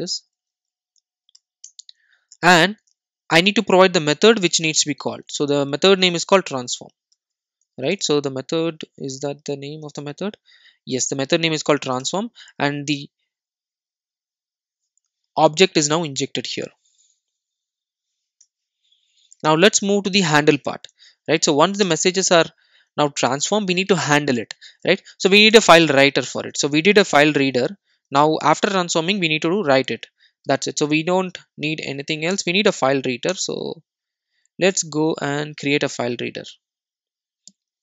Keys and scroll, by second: 1.8 Return, 7.1 alt+super+l, 9.8 super+z, 9.8 super+e, 22.0 ctrl+space, 32.3 alt+Return.